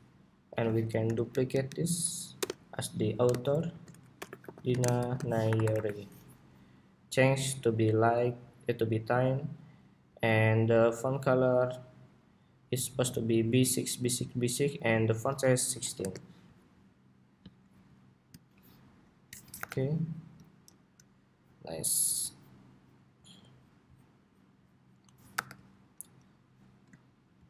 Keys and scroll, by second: 0.3 super+d, 5.9 Escape, 19.3 super+=, 21.8 super+s, 25.2 super+-.